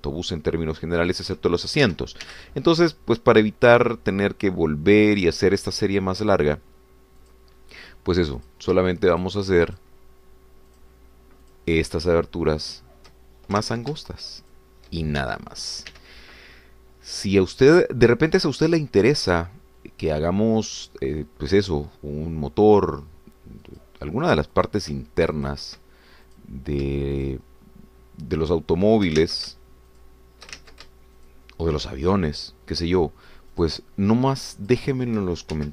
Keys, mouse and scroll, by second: 0.2 shift+click, 0.8 shift+click, 2.2 shift+click, 2.8 shift+s, 3.2 y, 8.2-9.7 drag, 10.1 shift+click, 10.7 shift+click, 11.7 shift+click, 12.4 shift+click, 13.7 shift+click, 14.9 ctrl+shift+z, 15.4 shift+click, 16.2 shift+s, 16.9 y, 24.8 click, 25.5 click, 26.5 shift+click, 27.4 click, 28.2 shift+click, 29.4 shift+click, 30.5 ctrl+z, 30.9 click, 31.6 ctrl+shift+z, 32.2 ctrl+shift+click, 33.4 shift+click, 34.7 shift+click.